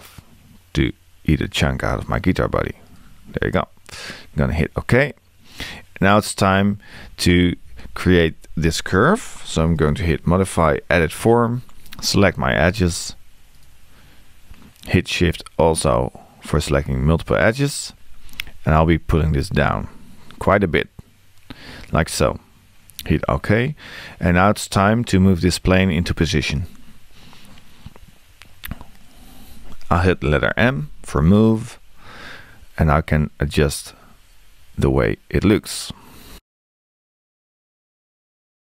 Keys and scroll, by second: 30.7 m.